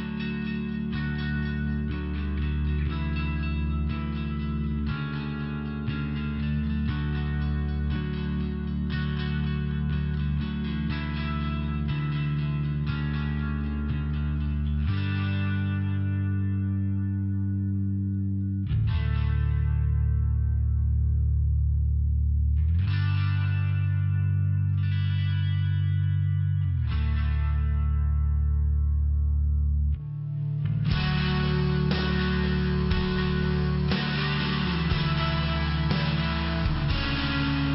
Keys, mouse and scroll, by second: 0.3 click, 0.4 click, 0.5-1.8 typing, 1.9 Return, 3.7 click, 3.8 click, 3.9 click, 4.0 click, 6.9 click, 6.9 click, 11.4 click, 11.5 click, 14.0 click, 14.1 click, 14.7 click, 18.0 click, 18.3 click, 18.8 click, 19.2 click, 19.2 click, 20.8 click, 20.9 click, 23.0 click, 24.2 click, 25.4 click, 26.5 click, 27.3 click, 28.4 click, 28.5 click, 31.8 click, 31.9 click, 34.1 click, 35.1 click, 35.4 click, 35.7 click.